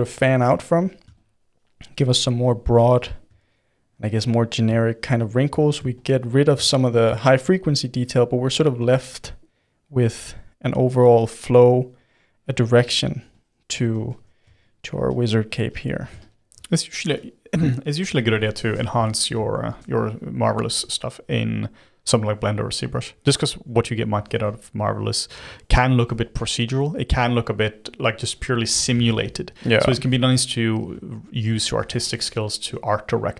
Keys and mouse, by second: 0.0 f, 0.5 f, 1.1-3.4 shift+drag, 3.4-4.9 middle drag, 4.9 shift+click, 5.6 middle click, 5.9 shift+click, 6.6 middle click, 7.2 shift+click, 7.7-8.7 middle drag, 8.7 f, 9.7-13.8 drag, 13.8 f, 14.6-16.5 shift+drag, 16.5-17.7 middle drag, 17.7 shift+click, 18.7-22.1 middle drag, 22.1-26.8 drag, 26.8-31.5 middle drag, 31.5 f, 32.6 f.